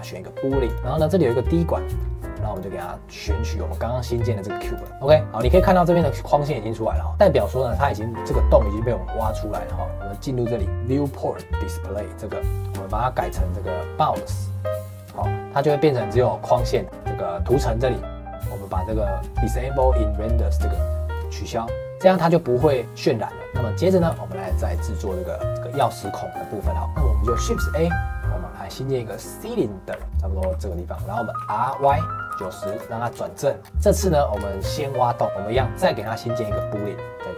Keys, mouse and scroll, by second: 0.7-2.5 middle drag, 2.5 click, 4.9-7.2 middle drag, 7.7-9.9 middle drag, 9.9-10.7 scroll down 2, 10.7 click, 12.4 scroll down 10, 13.2-15.0 drag, 15.0 shift+middle click, 15.5-16.7 scroll down 1, 16.7-17.9 middle drag, 21.1 click, 23.4 middle click, 23.5 click, 23.8 middle click, 24.7 click, 25.2-27.3 middle drag, 27.3 shift+a, 29.3 middle click, 29.9 s, 30.0 scroll up 1, 30.4 s, 30.9 middle click, 31.3 r, 33.2 shift+middle click, 33.6 scroll up 2, 33.6 shift+middle click, 34.3 scroll up 1, 34.4 shift+middle click, 35.2 click, 35.9 click, 36.5 click, 36.7-37.3 drag.